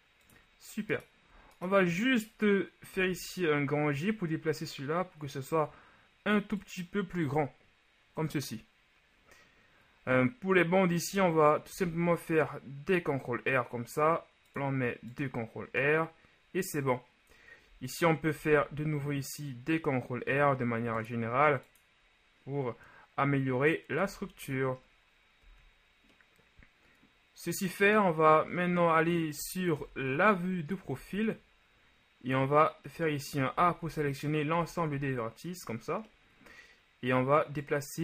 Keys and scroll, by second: 2.9 g, 11.7 ctrl+r, 18.4 ctrl+r, 24.2 a, 25.5 z, 29.8 ctrl+KP_3, 31.0 a, 33.7 a, 33.9 a, 34.6 a, 35.0 a.